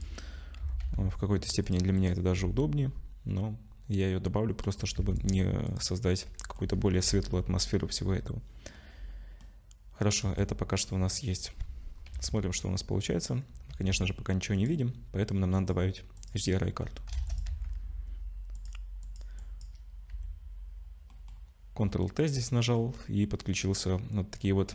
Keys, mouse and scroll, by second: 0.6 e, 1.9 click, 2.3 ctrl+b, 4.9 Tab, 5.2 right click, 6.1 middle click, 6.9 middle click, 10.2 KP_0, 10.9-11.9 scroll down 7, 11.9-12.3 scroll up 4, 12.1 z, 12.7 scroll up 1, 13.7 z.